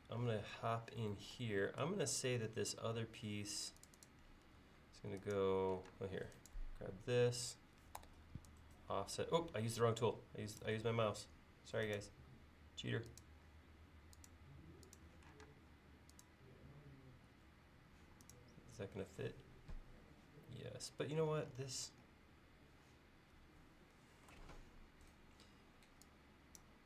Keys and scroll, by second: 4.5 l, 5.9 space, 8.0 f, 11.0 l, 13.7 l, 15.5 space, 21.0 l.